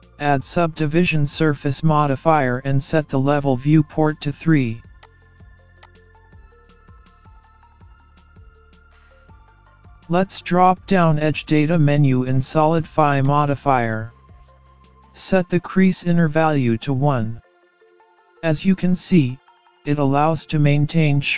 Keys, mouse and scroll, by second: 2.2-2.8 scroll down 1, 2.8-3.9 scroll down 4, 5.1 click, 5.8 click, 6.7 scroll down 2, 6.8 scroll up 2, 7.0 middle click, 8.2 scroll up 1, 8.4 middle click, 10.4 click, 13.3 click, 19.4-19.7 scroll up 1, 19.7 middle click.